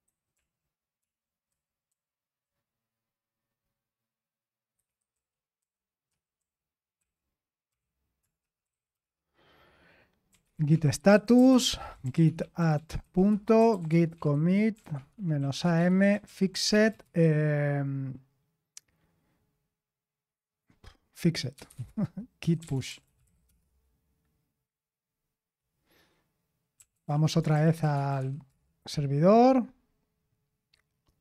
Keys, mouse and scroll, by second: 0.0-1.0 typing, 4.8-9.0 typing, 10.3-17.5 typing, 21.9-23.7 typing, 26.5-28.7 typing.